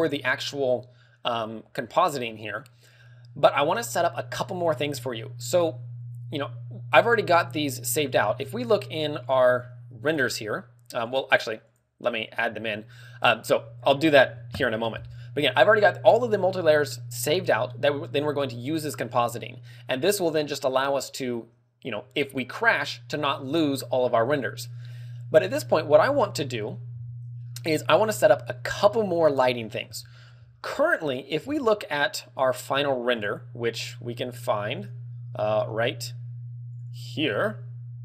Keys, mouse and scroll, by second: 25.7 middle click, 25.7-26.1 scroll down 5, 26.1-27.2 scroll up 8, 28.3 scroll down 1, 28.5 a, 28.8 KP_1, 29.5 scroll up 1, 30.6 shift+middle click, 31.1 scroll up 2.